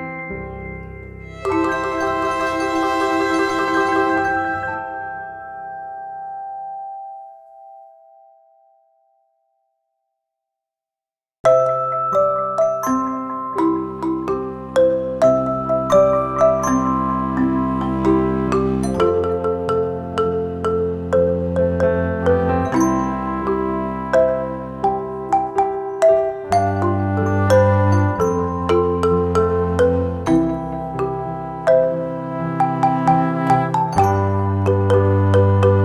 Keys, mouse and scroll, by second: 7.9-12.7 drag, 16.4 ctrl+click, 20.3 click, 26.1 right click, 26.8 click, 29.2-35.2 drag, 35.2-35.8 drag.